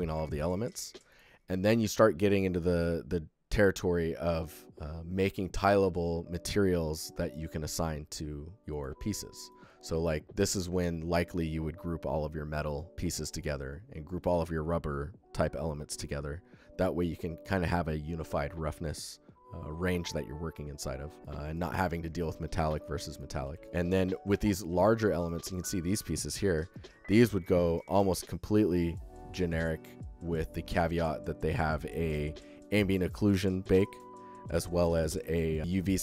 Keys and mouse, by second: 0.1-0.7 alt+shift+drag, 5.2 alt+shift+click, 8.6 click, 8.9 alt+middle drag, 9.3-10.2 alt+shift+middle drag, 21.2 alt+shift+middle click, 21.6 alt+middle click, 22.0-22.7 alt+shift+middle drag, 22.9 click, 23.3 ctrl+f, 23.9 alt+shift+click, 24.6 drag, 24.9 ctrl+alt+drag, 26.5 alt+shift+middle click, 26.6 alt+shift+drag, 26.7-27.1 alt+shift+middle drag, 27.3 alt+middle click, 35.6 alt+shift+middle click.